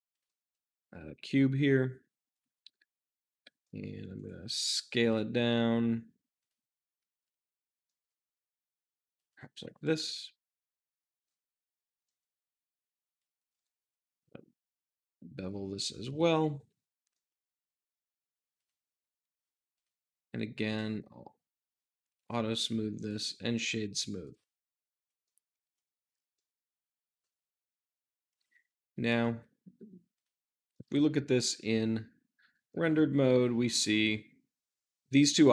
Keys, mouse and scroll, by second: 0.0-2.5 drag, 2.5 Tab, 3.5 s, 3.6 middle click, 4.1 click, 4.5 z, 6.3-7.6 drag, 7.6 s, 7.8-9.1 middle drag, 9.1 click, 9.5 `, 11.9 g, 12.0-13.1 middle drag, 13.1 click, 13.4 ctrl+b, 15.8 click, 16.0 Tab, 16.6 shift+z, 17.1-18.5 middle drag, 18.5-22.1 drag, 22.1 right click, 22.9-25.1 drag, 25.2-28.1 shift+middle drag, 28.1-30.7 drag, 30.7 middle click, 31.1-32.5 scroll down 2, 32.6-35.5 shift+middle drag.